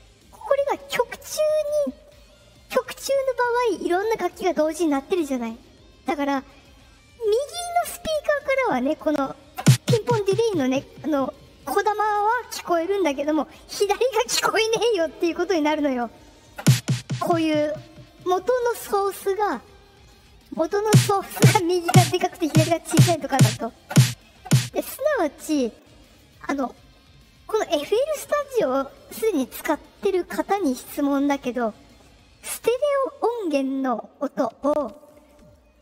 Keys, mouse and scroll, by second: 20.4 click.